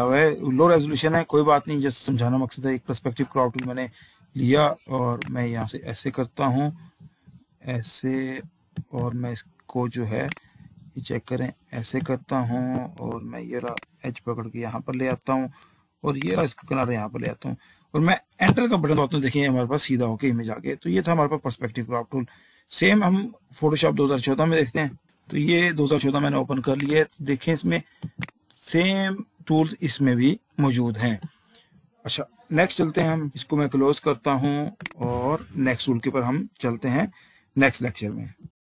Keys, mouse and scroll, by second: 1.2 z, 3.8 click, 5.5 click, 10.5 click, 13.9 click, 16.6 click, 18.6 typing, 18.7 Return, 25.4 click, 27.2 click, 33.7 click, 35.1 click.